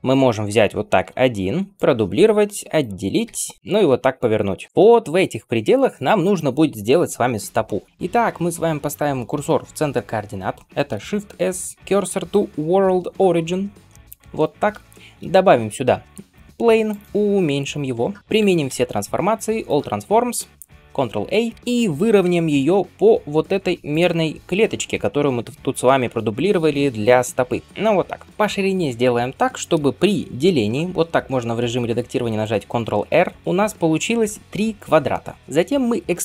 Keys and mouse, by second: 1.2 shift+d, 1.8-3.1 middle drag, 2.4 p, 3.1 Tab, 3.5 click, 3.8 r, 11.1 shift+s, 14.8 shift+a, 16.4 middle click, 17.0 s, 17.2 s, 18.5 ctrl+a, 21.4 Tab, 21.6 2, 22.1 g, 24.1-36.2 shift+middle drag, 27.6 g, 30.1 ctrl+r.